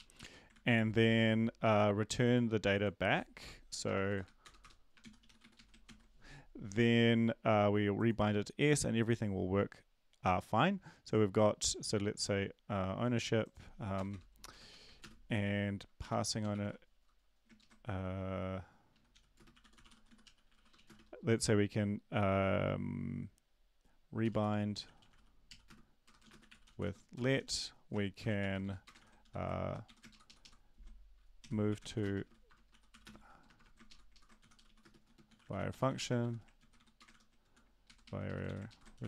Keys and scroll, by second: 0.0-0.5 typing, 0.5 Right, 4.4 Return, 4.4-5.9 typing, 4.6 Return, 13.9 Return, 14.1 Return, 15.8-17.1 typing, 17.6 ctrl+shift+Left, 19.4-21.2 typing, 25.0-27.9 typing, 28.0 shift+Home, 28.4 ctrl+c, 28.6 End, 28.9 Return, 29.0 ctrl+v, 29.0-36.7 typing, 33.9 ctrl+shift+Left, 34.1 ctrl+shift+Left, 37.1 ctrl+c, 37.5 End, 37.5 Return, 37.8-39.0 typing.